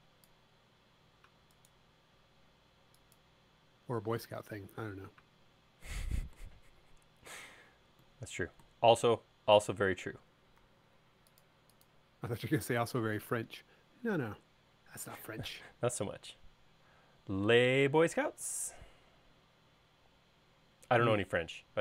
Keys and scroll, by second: 4.2 m, 7.4 q, 10.6 Left, 11.0 Right, 13.3 m.